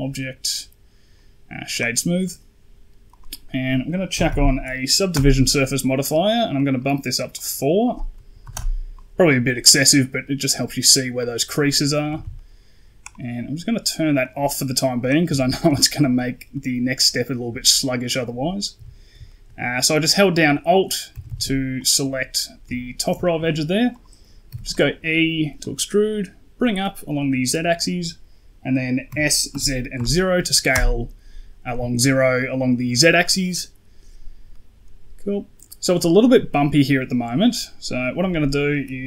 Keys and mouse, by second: 2.1 middle click, 3.0-5.1 drag, 6.4 click, 7.3-8.5 drag, 9.9 middle click, 12.0 a, 12.1 a, 12.2 middle click, 14.1 click, 14.9 right click, 15.1 Tab, 15.8 shift+middle click, 16.4 middle click, 17.8 alt+click, 18.6 KP_1, 19.1 shift+click, 20.6 click, 21.0 a, 21.1 a, 21.6 alt+click, 22.5 KP_1, 23.1 shift+middle click, 24.4 e, 25.5-27.4 drag, 29.4 s, 34.4 middle click, 35.5 middle click.